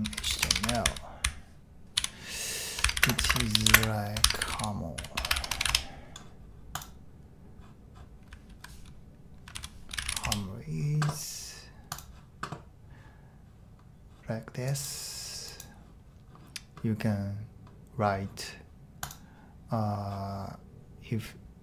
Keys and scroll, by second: 0.0-5.6 typing, 5.6 Return, 8.3 typing, 9.6 super+t, 9.6-10.6 typing.